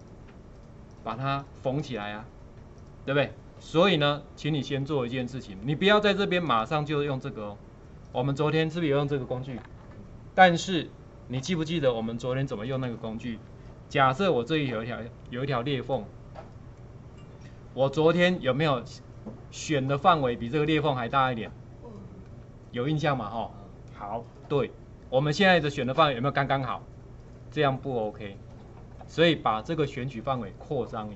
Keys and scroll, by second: 14.0 ctrl+2, 18.4 b.